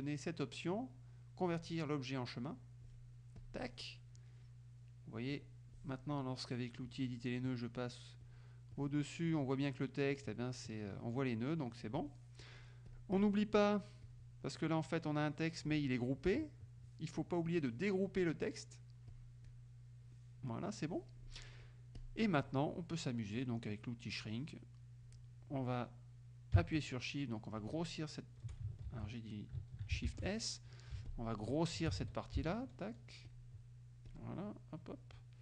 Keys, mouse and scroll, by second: 3.4 click, 5.4 click, 7.4 click, 8.3 click, 8.8 click, 9.4 click, 10.2 click, 10.6 click, 11.1 click, 11.6 click, 12.9 click, 14.1 click, 19.2 click, 22.0 click, 27.7 shift+click, 29.0 ctrl+shift+z, 30.1 ctrl+shift+s, 31.1 shift+click, 32.1 ctrl+shift+z, 32.5 ctrl+shift+click, 33.4 shift+click, 34.1 shift+click, 34.6 shift+click.